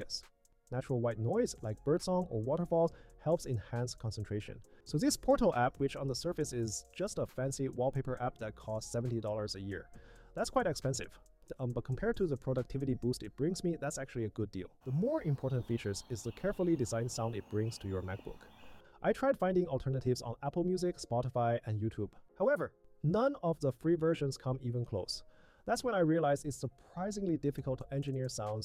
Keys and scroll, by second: 22.4 super+a.